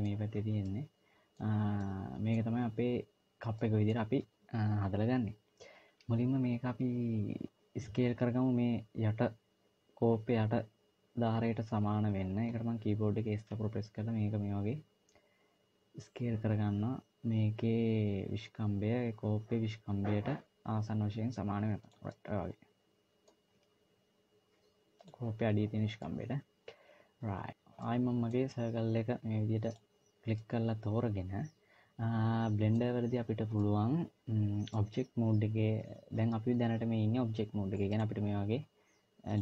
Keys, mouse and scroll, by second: 0.5 middle click, 3.4 middle click, 21.8 middle click, 23.4 s, 25.8 middle click, 27.7 middle click, 29.5 click, 30.1 middle click, 33.3 middle click, 34.5-35.3 scroll down 1, 37.7 click, 39.1 click.